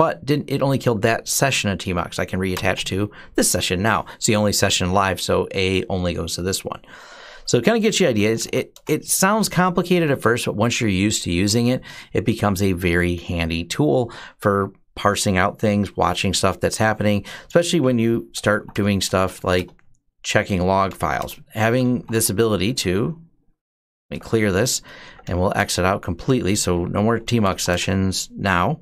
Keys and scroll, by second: 2.3 Return, 7.8-8.7 typing, 17.8-25.7 typing, 27.0-28.8 typing.